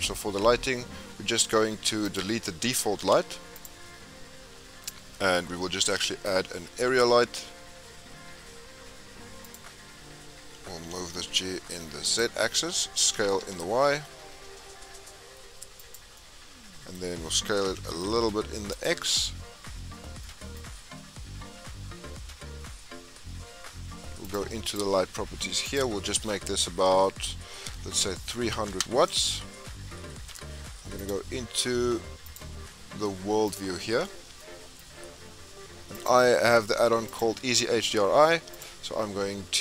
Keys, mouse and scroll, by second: 0.0-0.6 scroll down 2, 0.6 scroll up 3, 1.2 scroll down 1, 2.1 click, 3.6 x, 4.0 scroll down 3, 10.9 g, 13.1 s, 16.2-17.7 middle drag, 17.7 s, 20.2-24.3 middle drag, 24.3-28.7 drag, 28.7 KP_0, 35.4-36.2 middle drag, 36.2-39.6 drag.